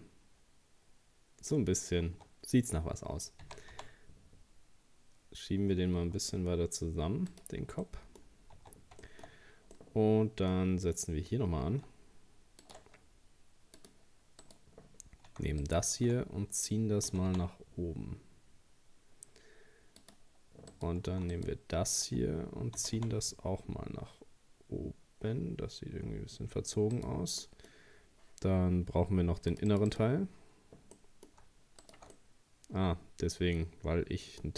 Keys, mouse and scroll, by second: 1.8-2.1 scroll down 2, 2.1 Tab, 3.4 s, 7.8 middle click, 8.4 scroll up 1, 8.6 Tab, 9.0 shift+middle click, 9.3-9.8 scroll up 1, 9.8 middle click, 10.6-10.9 scroll up 1, 11.9 ctrl+r, 14.4 right click, 15.6 alt+shift+right click, 17.1 g, 20.7 right click, 21.3 alt+shift+right click, 22.8 g, 27.4-29.5 middle drag, 29.5-31.0 drag, 31.0 middle click, 31.8 alt+shift+right click, 32.2-34.5 middle drag.